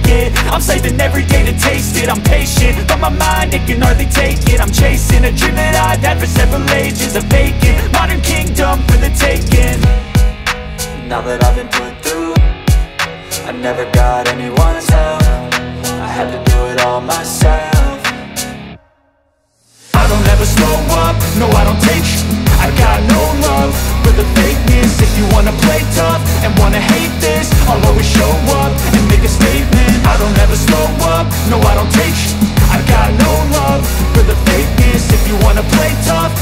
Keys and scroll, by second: 0.0 [, 4.0 alt+space, 13.6 ctrl+alt+z, 15.0 ctrl+z, 18.2 ctrl+alt+shift+e, 22.4 ctrl+shift+a.